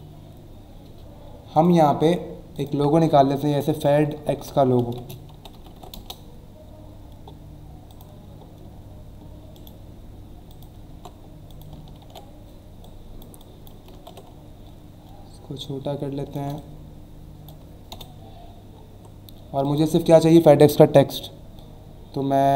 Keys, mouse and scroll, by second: 1.5 click, 2.5 click, 3.4-6.3 typing, 7.9 click, 9.5 right click, 10.5 click, 10.9 alt+Tab, 11.5 click, 12.8 click, 14.3 alt+scroll down 1, 15.6 alt+shift+click, 17.9 Return, 18.4 alt+scroll up 1, 19.6 click.